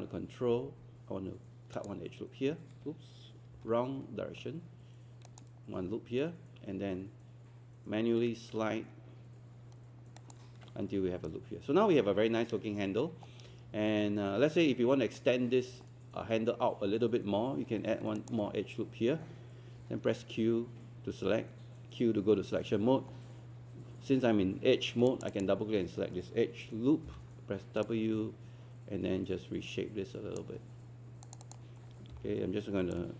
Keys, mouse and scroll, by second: 1.8 ctrl+click, 5.3 ctrl+click, 10.2 ctrl+click, 12.4-12.8 scroll down 1, 12.8 scroll up 1, 18.2 ctrl+click, 19.8 q, 25.1 click, 27.1 w, 27.8-30.8 drag, 32.1 typing, 32.9-33.1 drag.